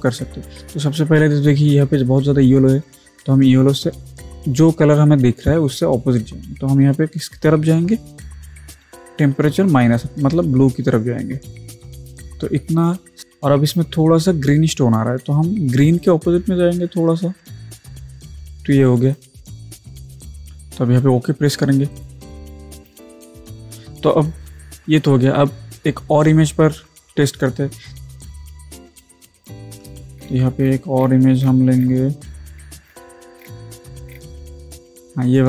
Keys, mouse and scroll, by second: 8.8 click, 16.0-21.6 drag, 22.0 click, 29.4 click, 30.2 scroll down 1, 31.0 scroll down 1, 32.9 scroll down 1.